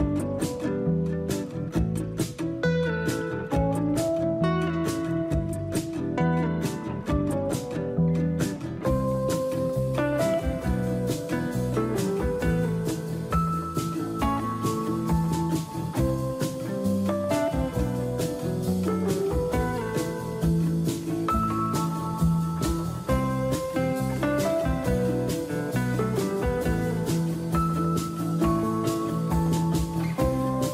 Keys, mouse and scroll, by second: 0.4 click, 4.6 Tab, 5.2-6.4 scroll down 3, 6.4-7.1 scroll down 1, 7.1 middle click, 8.0 click, 8.2 click, 8.2 2, 9.6 middle click, 9.6-10.4 scroll down 5, 10.4-11.2 scroll down 1, 11.2 click, 11.7 Tab, 18.4 click, 21.0-22.4 scroll down 4, 22.4 ctrl+z, 23.1 ctrl+z, 23.5 click, 25.9-28.8 scroll down 2, 28.8 click.